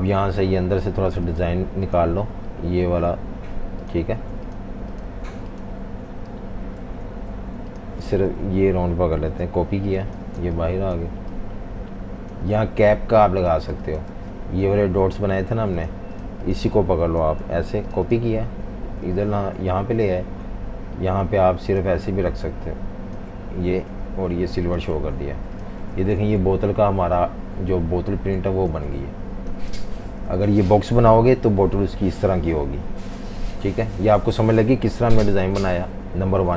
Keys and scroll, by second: 0.0 v, 3.0 super+3, 4.1 super+3, 5.2 super+3, 5.9 super+3, 6.8 super+z, 7.3 super+z, 8.2 alt+super+3, 9.1 super+c, 10.2-13.5 typing, 17.4 super+c, 18.4 super+v, 19.0 v, 23.9 i, 24.9 v, 25.3 v, 26.2 super+-, 26.4 super+-, 26.5 super+-, 28.4 typing, 30.3 v.